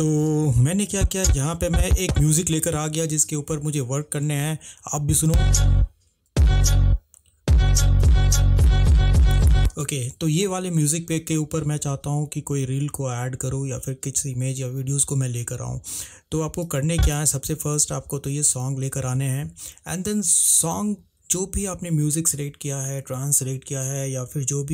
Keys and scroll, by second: 5.4 space, 9.9 space.